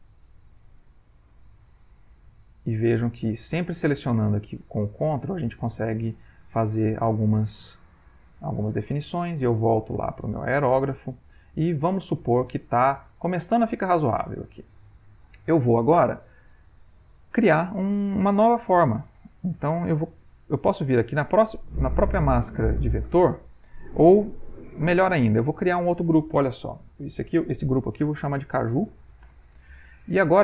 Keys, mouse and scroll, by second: 29.0 shift+u.